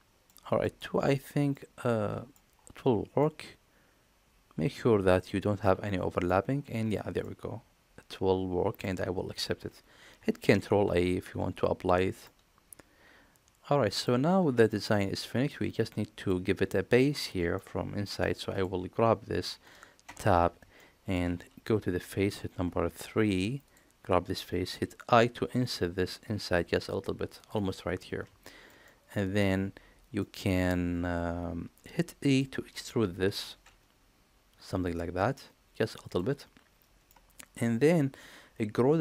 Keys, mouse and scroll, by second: 0.4 shift+middle click, 1.4-2.2 middle drag, 3.0-6.1 middle drag, 7.1-8.6 middle drag, 10.3 ctrl+a, 12.1-13.9 middle drag, 14.5 shift+middle click, 15.3-16.1 middle drag, 17.4-17.9 middle drag, 18.4 click, 19.8 Tab, 20.6 shift+middle click, 22.3 3, 23.4 click, 25.2 i, 28.2 shift+middle click, 28.7 middle click, 30.0-32.2 middle drag, 33.1 e, 36.2-36.9 middle drag.